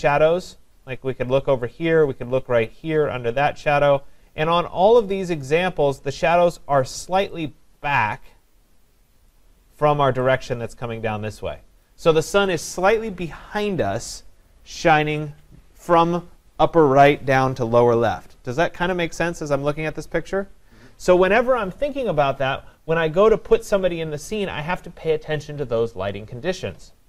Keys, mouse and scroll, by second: 1.6 click, 3.7 click, 9.3 click, 11.8 click.